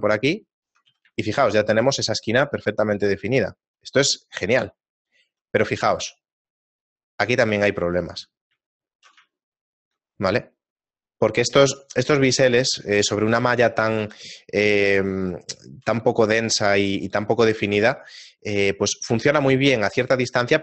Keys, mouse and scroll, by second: 0.7 Tab, 1.1 shift+middle click, 2.9 click, 4.9 shift+middle click, 5.8-6.4 scroll up 1, 6.4-8.1 scroll up 4, 8.7 shift+middle click, 9.4 ctrl+middle click, 12.4-12.9 scroll down 4, 13.8 scroll up 1, 14.0 Tab, 15.4 shift+middle click, 17.1 right click, 17.7 a, 18.0 shift+middle click, 19.7 Tab, 19.7-20.3 scroll down 3, 20.3 shift+middle click.